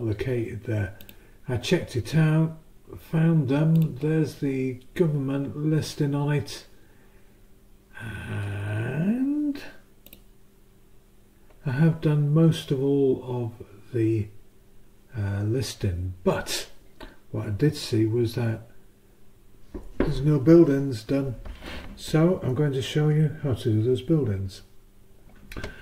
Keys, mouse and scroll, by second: 1.0 click, 3.7 click, 10.0 click.